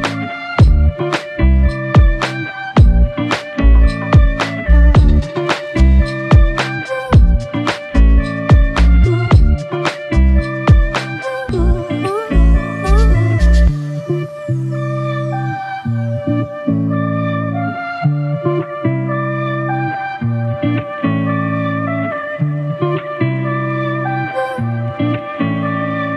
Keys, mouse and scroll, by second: 5.9 typing, 13.3 1, 13.8 ctrl+z, 14.2 ctrl+z, 14.5 ctrl+z, 14.9 ctrl+z, 21.1 f, 23.1 typing.